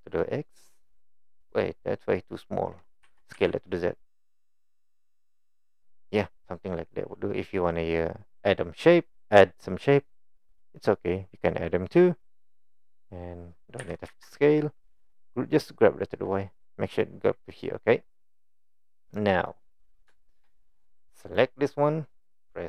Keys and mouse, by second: 3.1 s, 10.8-11.5 middle drag, 13.8 g, 18.2-18.6 middle drag, 19.2-19.5 middle drag, 20.2 shift+middle click.